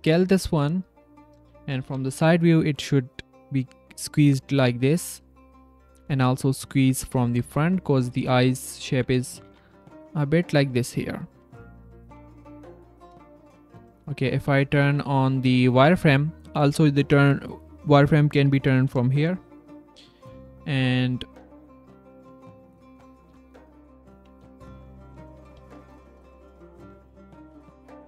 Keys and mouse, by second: 0.7 drag, 1.8 s, 5.1 click, 5.8 s, 7.4 g, 8.2 shift+drag, 9.1-12.0 typing, 11.6 drag, 13.1 s, 13.2 click, 13.8 q, 14.7 q, 17.0-19.8 drag, 20.8 g, 21.8 s, 22.8 drag, 23.1 g, 24.5 drag, 25.6 g, 26.7 s.